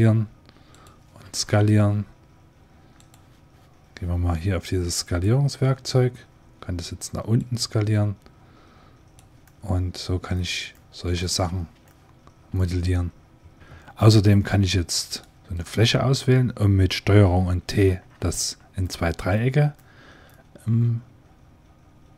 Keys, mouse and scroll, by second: 1.1 s, 4.9-6.7 drag, 7.3-9.0 drag, 9.3-11.4 middle drag, 11.4 Tab, 13.6 ctrl+z, 14.2-17.2 drag, 17.7 ctrl+t, 18.7 click, 20.9 click, 21.2 middle click.